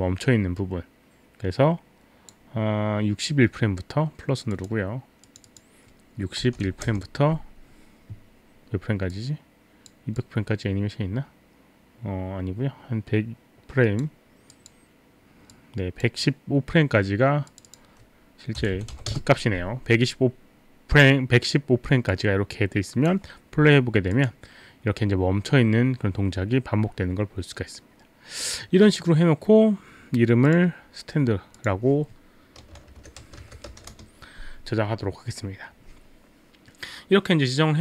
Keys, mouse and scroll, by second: 4.5 click, 5.2 click, 6.1 click, 6.4 KP_6, 6.7 KP_1, 6.9 Return, 9.1 click, 10.2 click, 14.5 click, 17.5 click, 17.7 click, 18.9 KP_5, 18.9 KP_1, 19.1 Return, 19.9 Return, 22.1 click, 24.2 click, 30.5 click, 31.6 click, 33.0-34.4 typing.